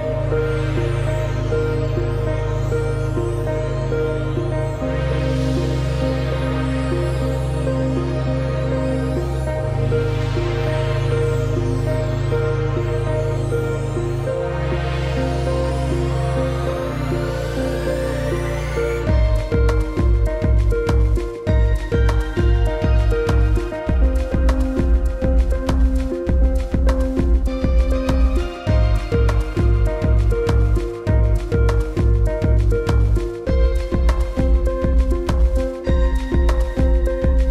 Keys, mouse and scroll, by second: 3.4 click, 3.9 ctrl+shift+g, 4.2 click, 5.0 ctrl+g, 5.7 click, 6.8 scroll down 1, 7.0 click, 7.3 space, 7.6 space, 7.8 click, 8.1 space, 8.3 click, 8.5 space, 9.1 alt+scroll up 1, 9.9 scroll up 1, 10.1 scroll down 1, 10.2 click, 10.6 space, 10.9 alt+scroll down 2, 11.1 click, 11.4 space, 11.6 click, 12.2 space, 12.4-12.7 alt+scroll up 2, 12.7 click, 13.0 space, 14.0 click, 14.2 scroll down 1, 14.4 click, 14.6 space, 15.1 alt+scroll up 1, 15.2 click, 16.6 click, 18.1 d, 20.3 shift+., 21.1 shift+click, 22.2 shift+click, 24.4-25.3 scroll down 1, 25.9-26.4 scroll up 1, 26.4 click, 27.0-28.0 scroll down 1, 28.2-29.1 typing.